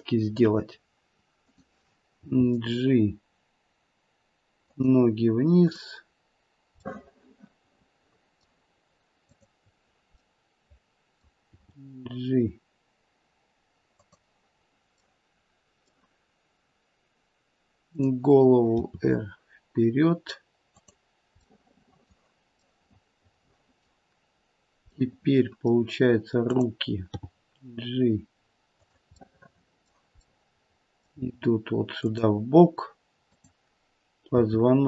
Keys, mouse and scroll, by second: 1.4 click, 2.2 g, 5.6 click, 6.9 middle click, 9.2 click, 10.3 middle click, 11.4 g, 15.0 middle click, 17.8 click, 18.7 r, 21.4 middle click, 22.6 middle click, 25.2 middle click, 25.6 middle click, 26.4 click, 27.1 g, 29.2 middle click, 30.2 middle click, 31.0 g, 33.2 click, 34.4 r.